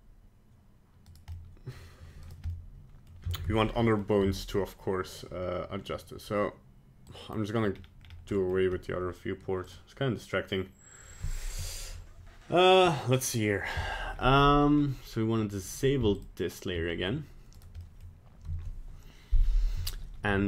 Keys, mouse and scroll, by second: 1.3 middle click, 2.2 right click, 2.5 middle click, 3.0 middle click, 3.4 ctrl+Tab, 3.8 middle click, 4.3 Tab, 7.0 click.